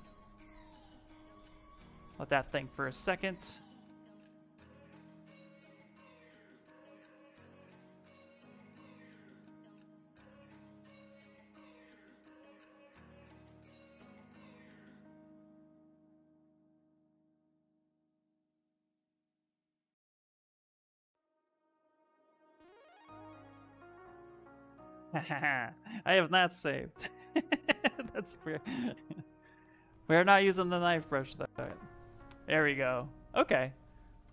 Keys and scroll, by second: 4.0 i, 5.9-9.8 typing, 12.4-14.9 typing, 24.2 ctrl+v, 25.4 Return.